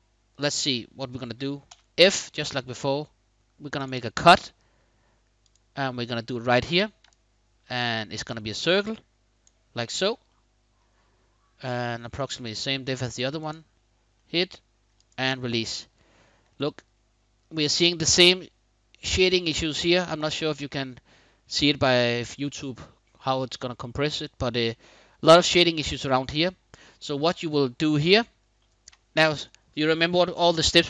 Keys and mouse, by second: 1.4 f, 5.1 click, 6.8-9.2 shift+drag, 9.6 shift+click, 10.0-10.5 middle drag, 13.1 click, 13.9-14.5 middle drag, 15.2-15.7 middle drag, 16.2-18.1 middle drag, 19.8-24.7 middle drag, 25.4-26.5 middle drag, 27.1-28.2 middle drag.